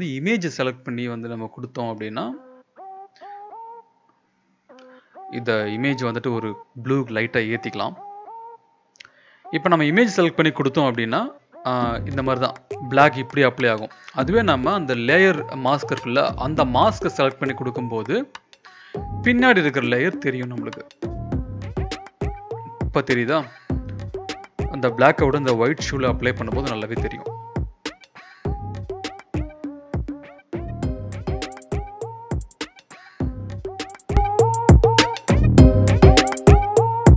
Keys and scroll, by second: 0.7 ctrl+b, 4.7 Return, 8.4 ctrl+z, 11.2 ctrl+z, 12.5 ctrl+z, 15.6 ctrl+z, 21.3 [, 21.4 [, 25.6-27.3 typing, 29.8 ], 30.0 ], 30.2 ], 30.3 ], 35.6 [, 35.7 [, 35.8 [, 35.9 [.